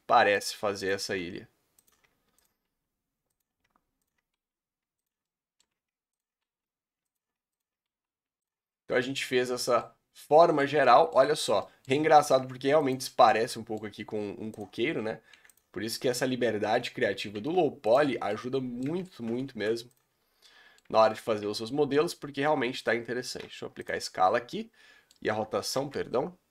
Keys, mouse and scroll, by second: 1.2 s, 2.6 s, 4.1 alt+click, 4.3 s, 5.2 shift+middle click, 6.1 alt+click, 6.4 s, 7.9 s, 8.6 Tab, 8.7 scroll down 6, 9.0 middle click, 10.0 scroll down 3, 10.2-10.7 middle drag, 10.7 Tab, 10.8-11.2 middle drag, 11.2 scroll up 2, 11.4 a, 11.6 middle click, 11.8 Tab, 12.3 r, 13.1 middle click, 13.4 Tab, 13.5 middle click, 13.8-14.2 scroll up 3, 14.6 click, 15.3 3, 15.6 click, 15.9 g, 18.1 Tab, 18.3 middle click, 18.9 Tab, 20.0 Delete, 20.3 scroll down 3, 20.5-20.8 middle drag, 20.8 Tab, 21.1-21.8 middle drag, 21.8-22.1 scroll up 2, 23.8 ctrl+a, 24.0-26.5 middle drag.